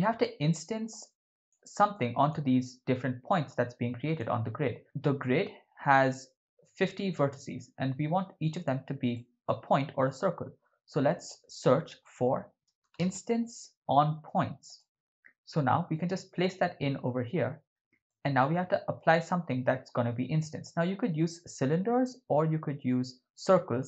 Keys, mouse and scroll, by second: 0.9-1.6 drag, 1.9-4.2 drag, 4.8 Tab, 9.1 shift+middle click, 10.1 shift+a, 18.1 ctrl+middle click, 20.6 shift+middle click, 23.7 shift+a.